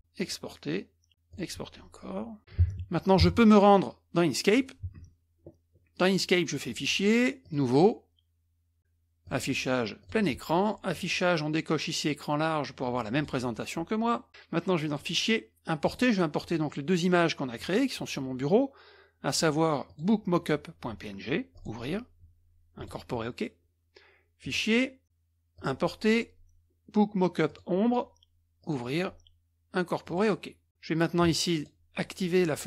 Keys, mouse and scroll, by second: 0.2-0.8 drag, 1.3 click, 2.6 alt+Tab, 3.2 alt+Tab, 4.5 alt+click, 6.7 click, 7.4 click, 9.2 click, 10.0 click, 10.2 drag, 10.9 click, 13.1 click, 14.8 click, 15.8 click, 17.6-17.9 drag, 19.9 click, 21.5 click, 22.8 click, 24.4 click, 25.6 click, 27.5 click, 28.6 click, 30.0 click, 31.5 click.